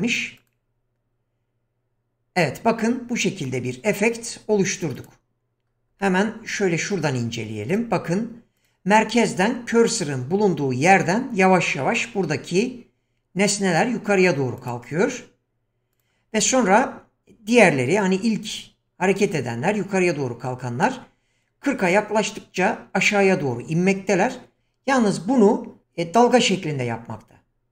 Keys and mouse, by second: 0.4 click, 5.0 click, 6.0-6.9 middle drag, 8.6 click, 14.6 click, 15.9 click.